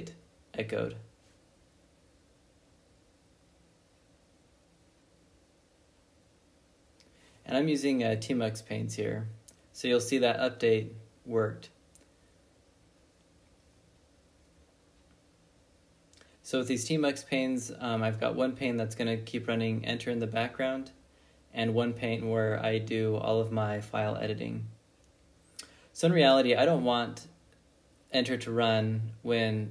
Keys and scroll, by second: 0.7 j, 1.5 i, 2.6-6.8 typing, 8.4 Return, 10.1 ctrl+b, 10.3 n, 14.2 ctrl+c.